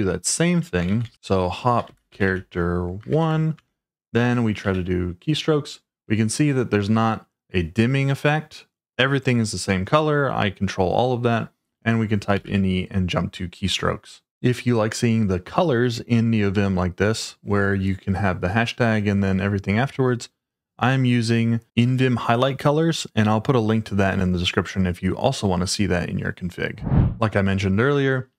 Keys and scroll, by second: 0.8-4.6 typing, 12.1-12.9 typing, 28.2-28.3 typing.